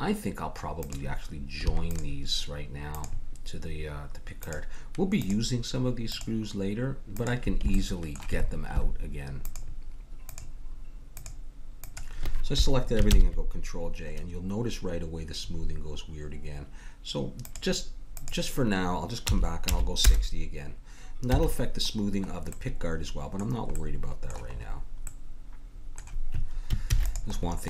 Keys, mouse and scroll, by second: 0.8-9.1 drag, 7.7-9.1 middle drag, 9.5-13.6 drag, 13.1 ctrl+j, 14.7-16.3 middle drag, 17.4-20.0 drag, 21.3 a, 26.9 ctrl+s, 27.0 middle click.